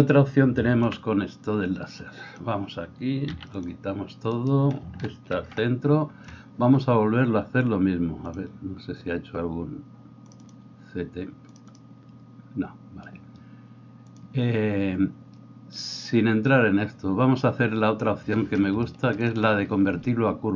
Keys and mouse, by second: 0.8 b, 3.3 x, 4.3 right click, 4.5-10.5 middle drag, 5.3 alt+g.